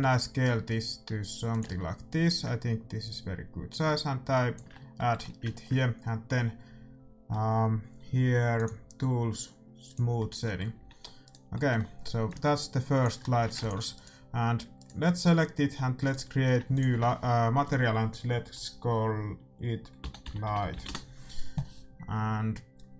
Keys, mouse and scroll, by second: 1.6 Tab, 2.3-4.3 drag, 4.7-8.4 middle drag, 8.5-11.7 drag, 10.2-11.7 middle drag, 10.7 a, 11.2-12.8 right drag, 12.2 click, 12.3 middle click, 13.0 click, 13.3 a, 13.5 ctrl+s, 14.2-16.0 right drag, 16.5-18.6 drag, 16.5 middle click, 22.7-22.9 drag.